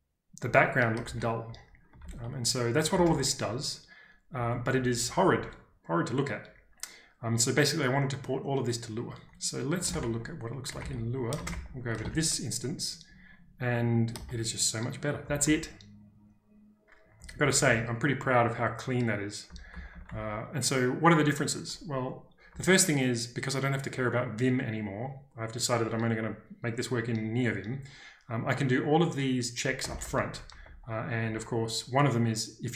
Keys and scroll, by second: 1.0 ctrl+j, 2.0 ctrl+k, 3.0 typing, 4.3-5.3 typing, 9.9 ctrl+space, 10.0 z, 11.4 ctrl+space, 11.5 h, 12.0 ctrl+space, 12.1 z, 15.2 k, 15.4 k, 17.1-18.0 typing, 19.4 typing, 29.6-31.2 typing.